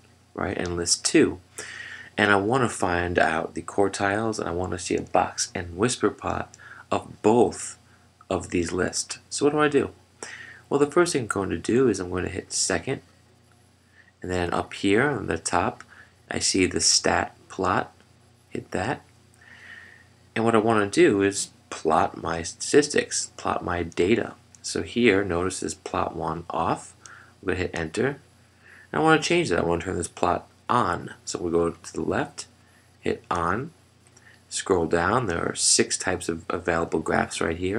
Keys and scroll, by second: 28.1 Return.